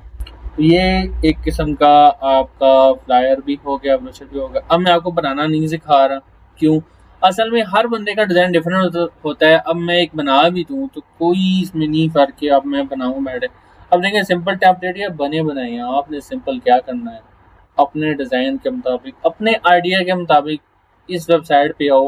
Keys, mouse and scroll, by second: 1.3 scroll down 1, 14.6 click, 17.4 scroll down 1, 17.9-18.7 scroll down 1, 18.7 scroll down 1.